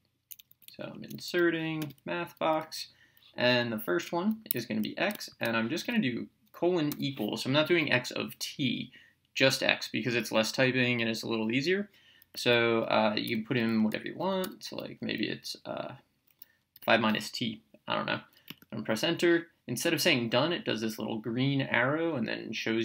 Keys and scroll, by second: 0.5 Down, 0.9 Right, 1.8 Return, 4.5 x, 6.9 =, 13.3 5, 14.4 -, 16.8 t, 18.4 Return.